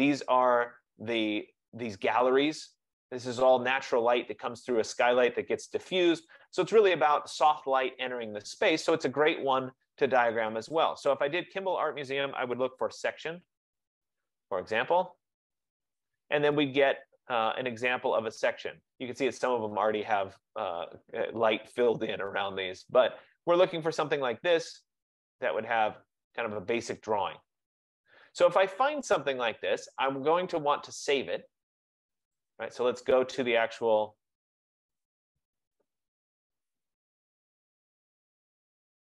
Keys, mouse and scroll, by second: 4.5 F15, 10.1-11.0 scroll, 11.7 click, 12.7-14.2 typing, 24.8-29.9 drag, 32.5 click, 34.9-36.1 scroll, 37.2 click.